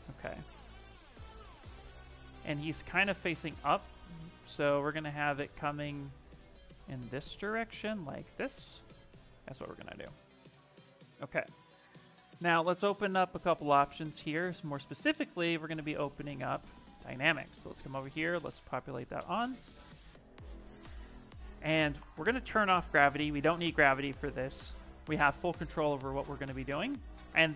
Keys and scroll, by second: 9.2 q, 25.8 shift+f.